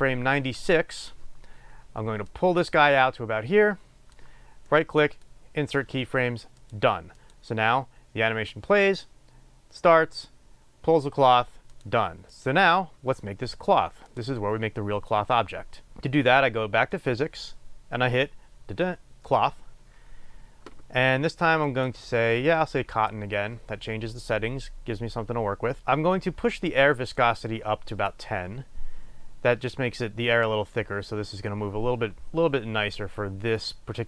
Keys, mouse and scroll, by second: 17.1 click, 21.7-34.0 drag, 29.1-32.6 scroll down 1.